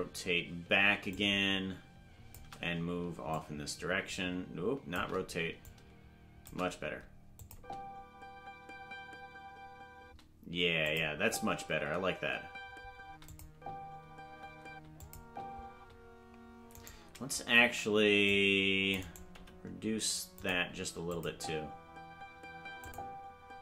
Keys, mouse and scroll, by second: 1.0-2.3 drag, 3.3-4.9 drag, 5.6 click, 7.3-10.1 drag, 7.5 space, 10.1 space, 10.8 click, 11.0 space, 13.2 click, 13.2 space, 13.5 space, 15.0 click, 15.0 space, 15.2 space, 15.7 space, 16.7 right click, 17.6 c, 19.3 g, 21.1 click, 21.2 space, 22.8 click.